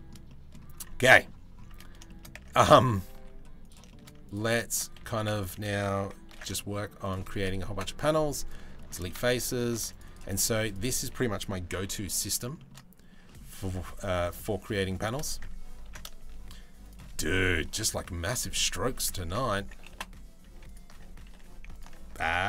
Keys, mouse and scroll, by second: 0.7 middle click, 1.3 Tab, 1.7 middle click, 1.9 Tab, 2.8 ctrl+r, 3.5 shift+middle click, 4.6 2, 5.9 ctrl+b, 7.3 Delete, 8.4 shift+middle click, 9.3 1, 9.4 ctrl+r, 10.1 1, 11.3 g, 12.2 shift+middle click, 12.9 middle click, 13.3 ctrl+r, 15.5 ctrl+b, 17.9 ctrl+b, 17.9 Delete, 18.9 ctrl+z, 19.5 Delete, 20.9 2, 22.3 ctrl+b.